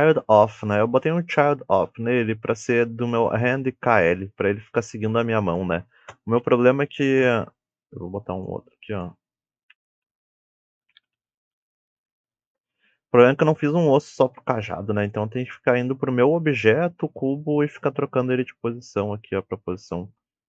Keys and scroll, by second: 9.6-12.1 typing, 12.4 Return, 18.4 g.